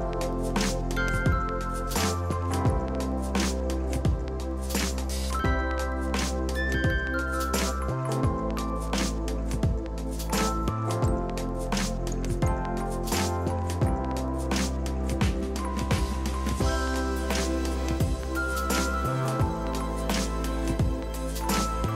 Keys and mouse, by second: 0.0 ctrl+d, 0.1 click, 0.9 a, 1.0 click, 2.3 ctrl+1, 2.4 click, 2.5 ctrl+shift+click, 2.7 ctrl+shift+x, 2.8 click, 3.3 click, 4.0 ctrl+1, 4.1 s, 4.3 ctrl+click, 4.9 ctrl+1, 5.0 click, 5.2 ctrl+shift+x, 5.7 s, 5.9 ctrl+click, 6.9 ctrl+click, 7.3 click, 8.1 ctrl+1, 8.3 click, 8.8 ctrl+click, 9.1 right click, 9.4 click, 12.4 ctrl+click, 14.0 click, 14.3 KP_9, 14.7 Return, 15.1 click, 16.4 Delete, 17.8 click, 17.9 ctrl+click, 18.5 ctrl+click, 19.0 Return, 19.4 click, 20.1 Delete, 20.5 click.